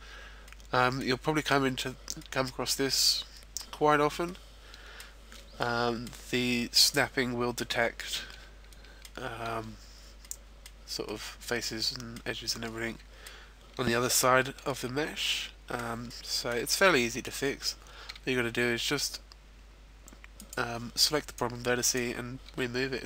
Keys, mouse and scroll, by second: 0.0-0.8 scroll down 3, 0.4 middle click, 2.0 middle click, 4.0 middle click, 5.3 middle click, 7.1 middle click, 7.7-8.1 scroll down 1, 8.1 middle click, 10.1 middle click, 11.1 middle click, 12.7 middle click, 14.7 middle click, 16.1 middle click, 16.6-17.3 scroll up 1, 17.3-18.1 scroll up 4, 18.1 g, 20.4 click, 21.3 right click, 22.5 g.